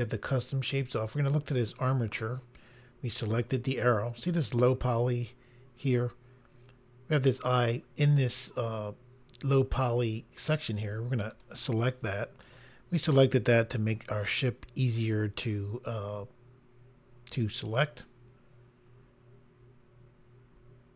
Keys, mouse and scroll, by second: 1.7 click, 11.3 click.